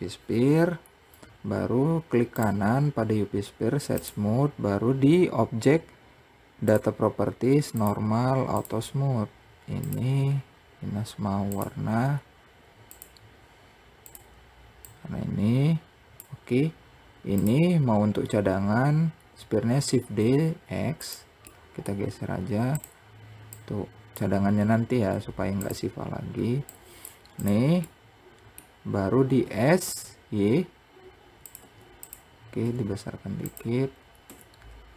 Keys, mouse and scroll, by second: 1.7-4.8 right drag, 6.1 click, 7.1 click, 9.2 click, 10.9-12.4 drag, 13.5 click, 16.8 click, 19.4 shift+d, 20.9-22.1 middle drag, 22.1 click, 26.1 click, 26.8 click, 27.3-28.8 middle drag, 28.8 s, 32.1 s.